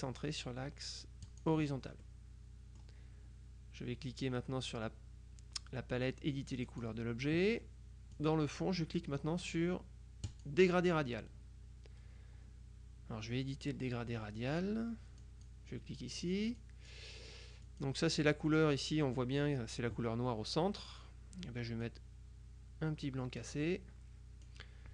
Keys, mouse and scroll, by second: 1.4 click, 2.1-3.4 middle drag, 6.8 click, 8.2 click, 10.3 click, 15.3 click, 16.9 click, 17.7 click, 20.9 click, 21.9-24.0 drag, 24.6-24.9 drag.